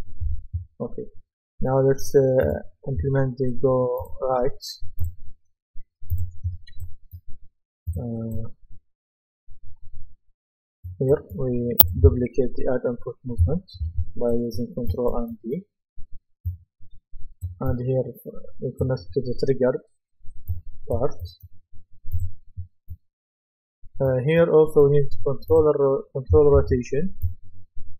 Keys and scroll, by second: 13.8 ctrl+d, 26.6 ctrl+d.